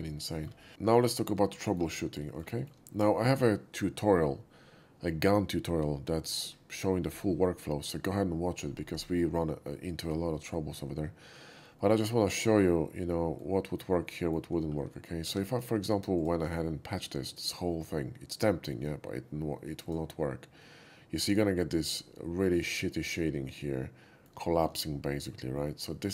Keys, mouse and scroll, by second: 0.3 middle click, 1.6 shift+middle click, 2.2 shift+middle click, 2.6 shift+middle click, 11.8-13.4 middle drag, 14.2 middle click, 15.0 shift+middle click, 16.2 alt+click, 16.7-18.7 middle drag, 19.9 click, 20.6-22.0 middle drag, 23.2-24.3 middle drag, 24.5 shift+middle click, 24.8-25.3 shift+middle drag, 26.0 shift+middle click.